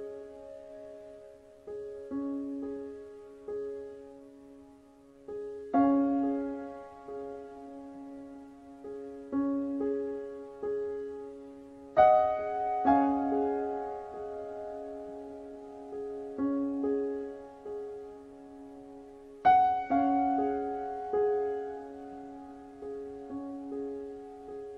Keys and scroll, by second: 19.1 KP_3.